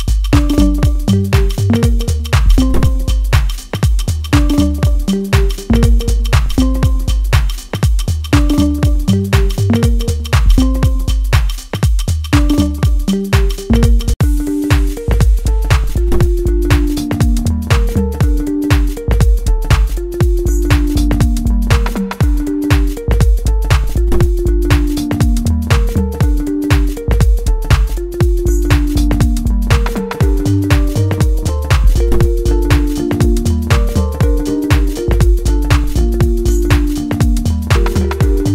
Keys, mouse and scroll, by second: 1.8-3.9 middle drag, 3.9 click, 4.2-6.0 middle drag, 6.0-8.5 drag, 8.5 middle click, 9.5-13.3 drag, 13.3-23.0 middle drag, 23.0-23.9 scroll down 1, 23.9-28.9 middle drag, 28.9-29.3 scroll down 1, 29.3-30.6 middle drag, 30.6-31.1 scroll up 1, 31.1-32.5 middle drag, 32.5-33.5 scroll up 1, 33.7 shift+middle click, 34.4 scroll up 1, 34.7-38.4 middle drag, 38.4-38.5 drag.